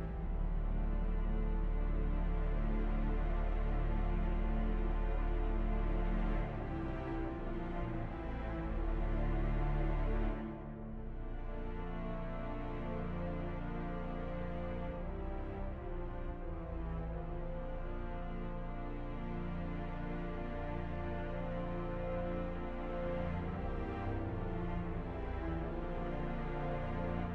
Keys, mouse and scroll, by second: 10.1 right click, 11.3 ctrl+-, 18.6 ctrl+-, 18.8 ctrl+-, 19.0 ctrl++, 19.8 ctrl++.